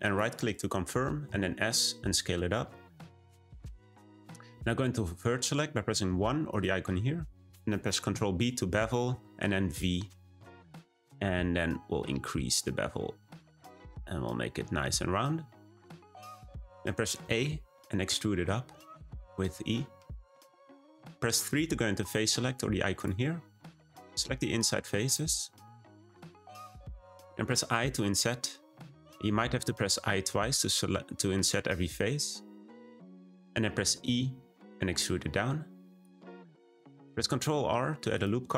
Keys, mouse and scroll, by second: 1.2 s, 6.4-7.4 drag, 8.0 b, 17.2 a, 18.0 e, 22.9 click, 24.5-26.3 shift+drag, 26.6 shift+click, 28.0 i, 34.0 e, 36.4 middle click, 37.2 r.